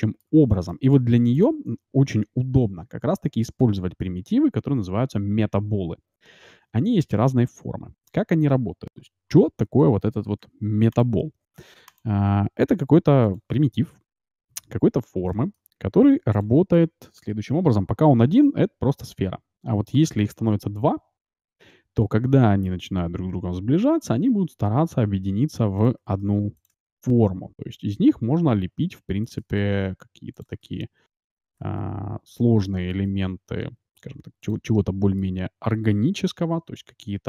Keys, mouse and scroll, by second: 1.4-3.1 drag, 8.9 middle click, 10.4 g, 11.2 s, 12.3 g, 14.1 KP_Decimal, 14.6-15.8 middle drag, 15.8 s, 18.4 z, 18.8 z, 20.3 shift+d, 26.1 shift+d, 26.8 shift+d, 29.5 shift+d, 30.7 shift+d, 31.7 shift+d, 32.6-34.4 middle drag, 33.2 shift+d, 34.7-36.3 middle drag, 36.3 g.